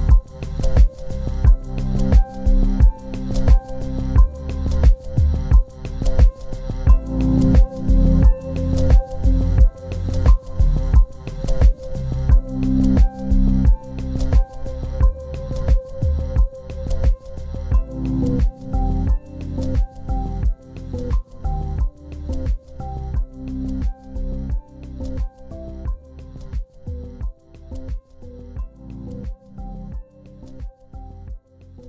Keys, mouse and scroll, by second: 22.2 double click.